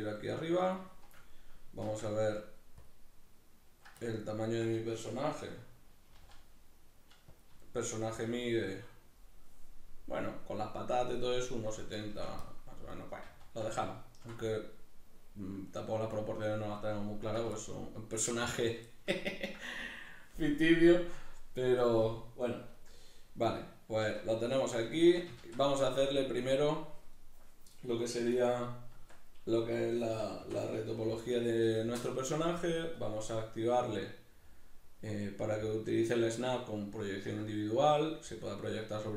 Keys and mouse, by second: 0.8 click, 0.9-7.5 shift+middle drag, 1.9 shift+a, 5.3 z, 7.5 click, 7.7-8.9 shift+middle drag, 8.2 g, 8.9 click, 12.1 x, 12.9 right click, 13.3 z, 13.9-28.9 ctrl+middle drag, 24.1 alt+q, 25.4 shift+a, 28.9 Tab, 33.0-39.1 drag.